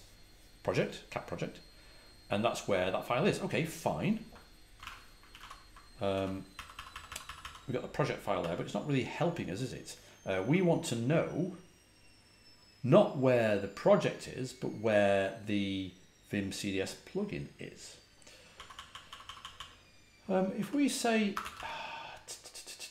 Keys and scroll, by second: 4.4-7.7 typing, 5.3 ctrl+l, 18.5-19.3 typing, 20.5-22.0 typing.